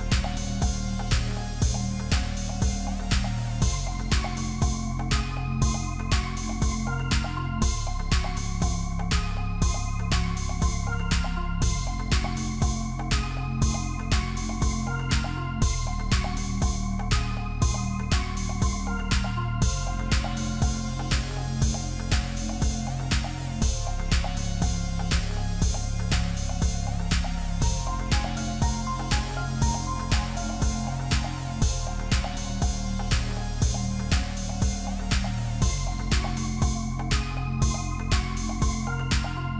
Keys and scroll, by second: 26.4 ctrl+z.